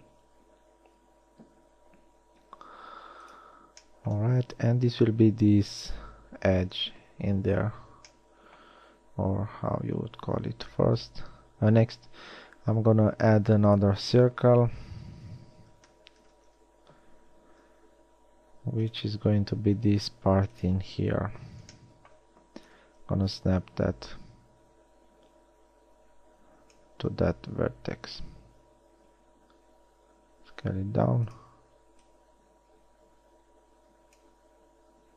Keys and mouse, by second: 6.3 z, 7.5 a, 10.7 shift+a, 16.1 r, 18.0 s, 19.7 g, 29.0 s.